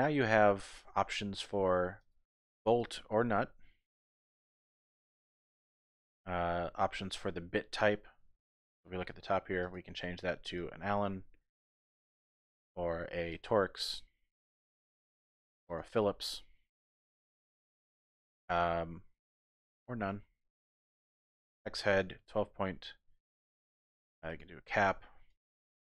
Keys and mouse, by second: 2.0-3.0 drag, 4.3 click, 8.0 middle click, 9.6-10.6 drag, 12.6 click, 14.4-15.8 drag, 16.9-19.8 drag, 21.1 click, 23.4-24.5 drag, 25.4 click.